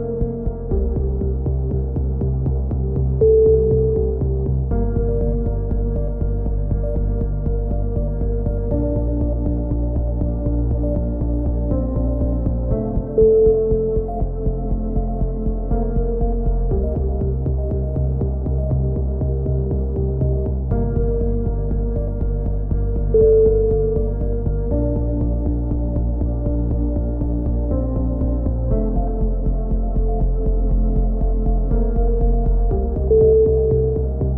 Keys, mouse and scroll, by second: 2.0 middle click, 2.5 z, 3.2 k, 5.2 right click, 5.7 x, 6.5 a, 6.6 click, 8.7 KP_3, 11.8-14.6 middle drag, 12.6 z, 13.4 z, 14.6 ctrl+r, 16.3-18.3 middle drag, 17.3 a, 18.3 click, 19.7 g, 21.6 middle click, 21.6 a, 21.8 z, 22.2 Tab, 25.2-26.2 drag, 26.2 Tab, 27.2 click, 27.4-29.3 typing, 28.4 click, 30.0 click, 32.0 ctrl+KP_7, 32.2 z, 33.6-34.3 right drag, 34.2 click.